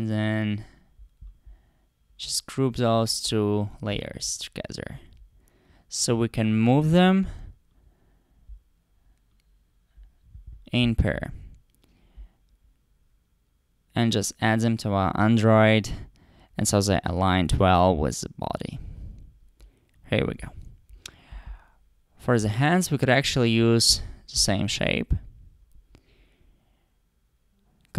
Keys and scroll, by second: 23.9 super+c, 24.4 super+v.